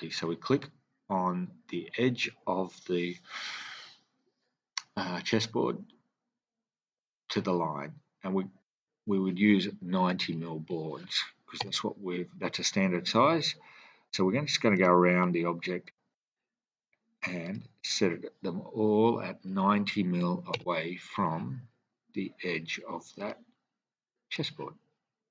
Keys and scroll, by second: 10.1 9, 11.6 Return, 11.6 typing, 19.4 typing, 20.5 Return, 20.5 typing.